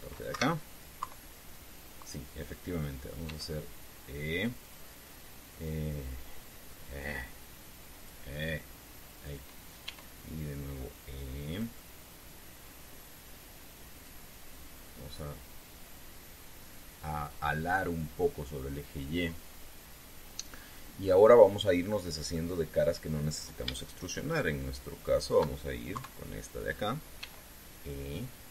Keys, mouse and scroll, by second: 1.1 Escape, 1.8 KP_3, 4.0 e, 5.4 click, 6.4-10.2 drag, 10.6 e, 12.2 click, 13.4-15.0 drag, 16.7-19.6 drag, 23.0 middle click, 25.0 shift+right click, 25.8 shift+right click, 26.7 KP_3, 27.9 e.